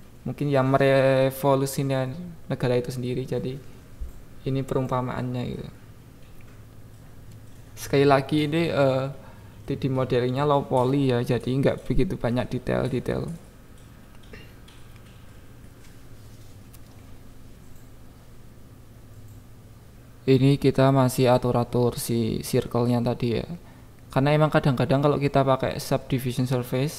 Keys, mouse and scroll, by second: 0.6 click, 1.2 e, 1.4-2.2 Up, 2.5 click, 3.4 click, 4.3 click, 5.3 click, 5.7 click, 5.9 click, 6.4 KP_7, 6.7 Tab, 7.0 click, 7.4 click, 8.3 KP_7, 8.8 click, 9.1 click, 10.5 shift+s, 11.4 shift+d, 11.7 click, 12.8-15.9 drag, 16.8 Tab, 17.5 g, 17.6 y, 18.4 click, 18.8-19.6 ctrl+z, 20.4 click, 21.5 click, 22.1 KP_1, 22.6 click, 22.8 Tab, 23.8 KP_7, 25.3 click, 26.1 click, 26.3 click.